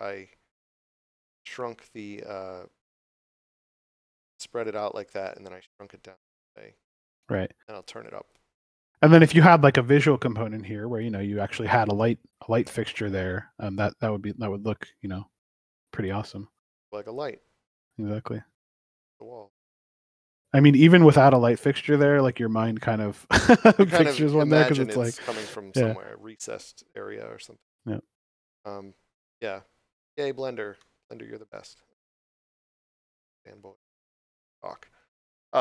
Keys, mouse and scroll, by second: 8.9 6, 9.5 Return, 13.5 click, 17.3 scroll down 1, 29.9 scroll down 1, 30.7 middle click, 31.7 scroll down 1, 33.2 scroll down 1, 33.7 middle click.